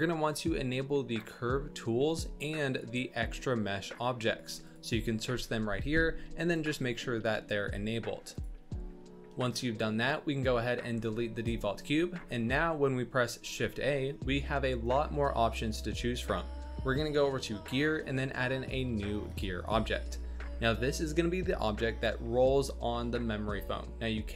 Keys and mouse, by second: 10.8 x, 13.5 shift+a.